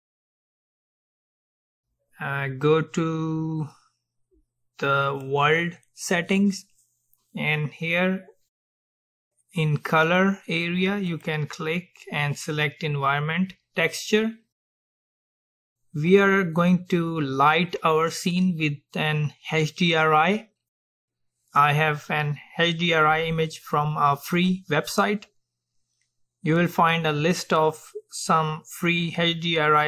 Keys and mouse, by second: 5.2-7.1 drag, 11.1-13.3 drag.